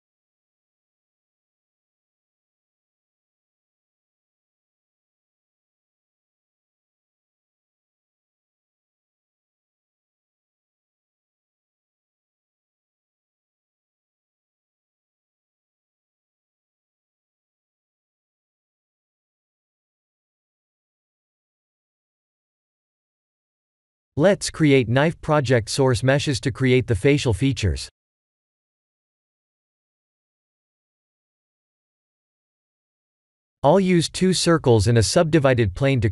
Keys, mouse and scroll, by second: 0.1 ctrl+r, 1.9 click, 3.1 shift+middle click, 4.2 ctrl+r, 5.6 click, 6.9 ctrl+r, 8.2 click, 9.9 ctrl+r, 11.8 ctrl+z, 12.4 click, 13.3 middle click, 16.8 KP_1, 17.5-17.9 scroll down 3, 17.9 shift+middle click, 18.5-19.3 scroll up 5, 19.5 shift+middle click, 21.0 middle click, 21.0 middle click, 21.8 KP_1, 22.2 KP_3, 23.1 shift+middle click, 23.7-24.2 scroll up 7, 24.3 shift+middle click, 24.9 Tab, 25.2 shift+middle click, 25.9 click, 26.4 shift+a, 30.1 r, 32.9 ctrl+3, 33.3 s, 35.1 shift+z, 35.7 s.